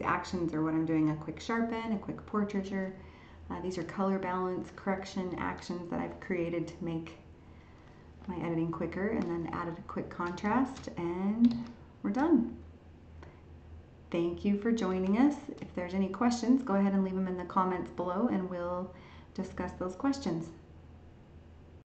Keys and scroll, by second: 10.6 ctrl+shift+e, 11.5 ctrl+s.